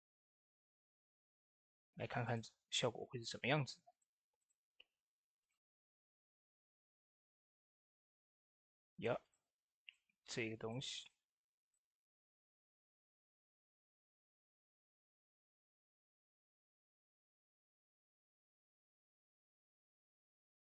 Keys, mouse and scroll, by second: 0.9 click, 7.9 shift+d, 9.1 click, 10.8 ctrl+z, 10.9 ctrl+middle click, 12.0 scroll down 1, 12.7 click, 13.5 middle click, 15.0 click, 18.7-20.7 drag.